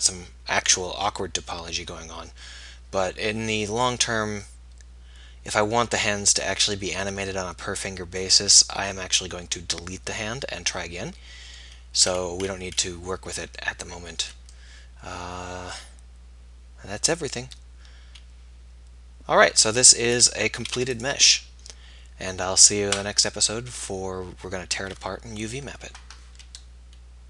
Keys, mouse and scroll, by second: 2.6 middle click, 11.8 middle click, 20.6 ctrl+s.